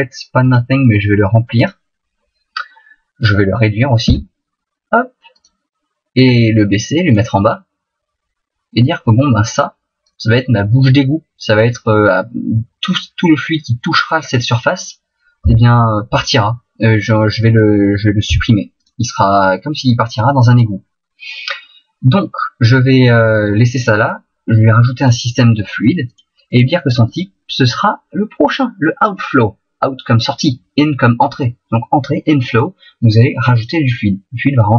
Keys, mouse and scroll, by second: 0.4 click, 4.2 s, 5.5 click, 6.3 click, 7.5 middle click, 10.9 middle click, 15.4 s, 16.2 click, 18.2 s, 18.8 click, 25.0 click.